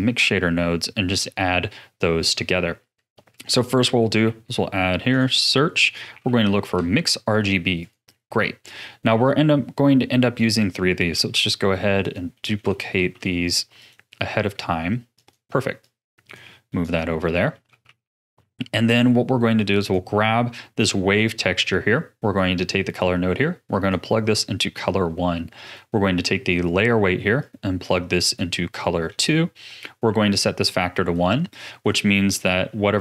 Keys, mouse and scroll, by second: 1.2-2.3 middle drag, 2.3-3.3 scroll up 1, 3.3 click, 4.2 shift+a, 8.2-8.6 scroll up 4, 8.6 middle click, 9.2 click, 11.1 shift+d, 12.3 middle click, 12.9 shift+d, 14.2 middle click, 15.1 click, 15.8 click, 16.8 click, 17.2 middle click, 18.0 ctrl+s, 18.4-19.8 middle drag, 19.8 click, 20.2-22.6 middle drag, 22.6 click, 25.6 click, 27.4 click, 28.7-30.6 middle drag, 30.6-33.0 drag.